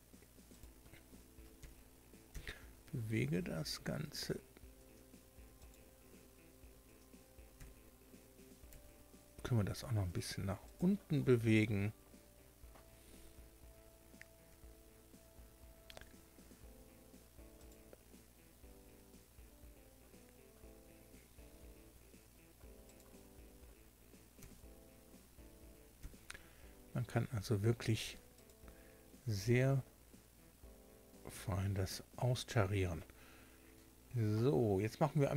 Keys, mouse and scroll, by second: 0.5 click, 1.5 g, 2.3 x, 5.6 click, 7.5 g, 8.7 y, 10.7 click, 14.5 g, 15.9 x, 17.5 click, 18.6 s, 22.9 click, 24.3 g, 25.9 x, 28.3 click.